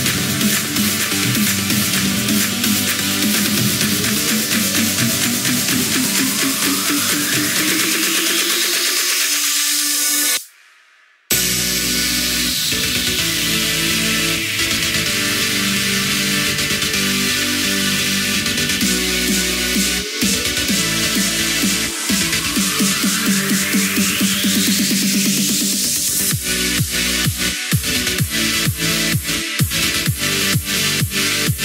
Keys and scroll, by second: 15.5 ctrl+z, 17.7 ctrl+z, 21.7 ctrl+z.